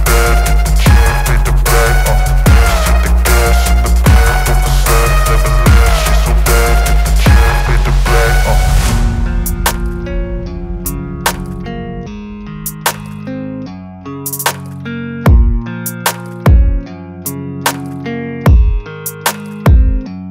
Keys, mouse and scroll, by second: 1.9-2.3 alt+scroll down 1, 4.6-10.9 drag, 10.9 ctrl+0, 11.6 v, 12.8 click.